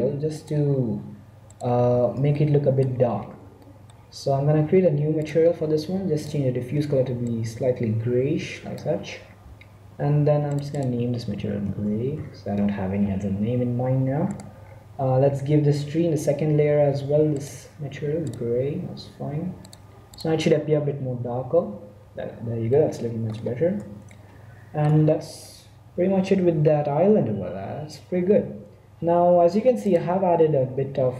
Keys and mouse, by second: 0.5 z, 1.4 click, 1.8 z, 2.2-3.3 drag, 5.1-7.8 drag, 10.4-12.3 drag, 13.2 2, 14.2-16.0 right drag, 16.0 middle click, 17.3-19.0 drag, 18.7 1, 19.5-21.5 drag, 22.7 middle click, 23.8 middle click.